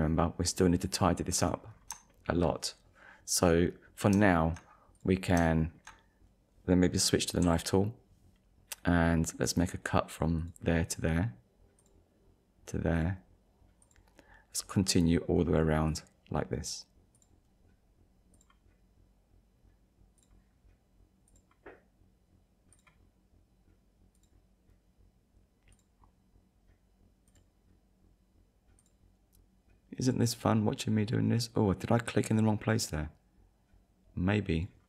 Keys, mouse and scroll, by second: 1.7-2.1 scroll down 2, 3.7 scroll up 1, 4.3 shift+middle click, 5.0 click, 5.5 shift+middle click, 7.4 k, 10.4 click, 11.8 click, 13.0 click, 13.8 click, 15.9 click, 17.2 click, 18.4 click, 20.2 click, 21.3 click, 22.7 click, 24.2 click, 25.7 click, 27.3 click, 28.8 click, 30.0 click, 34.6 click.